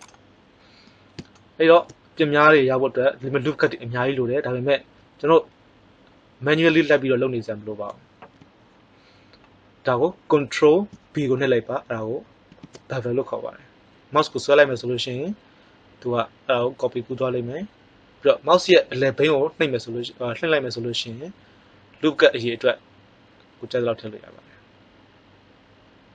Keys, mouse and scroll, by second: 1.3 middle click, 8.2 n, 12.4 ctrl+b.